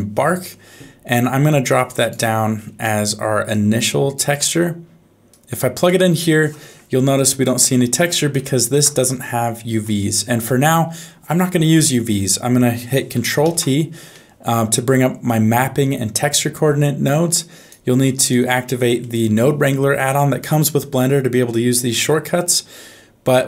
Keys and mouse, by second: 2.9 middle click, 3.5 click, 5.3 click, 7.4 middle click, 8.6 shift+middle click, 9.5 shift+middle click, 10.0 middle click, 11.0 middle click, 11.8 click, 12.2 middle click, 13.4 ctrl+t, 14.2 middle click, 17.4 click, 18.1 click, 19.0 middle click.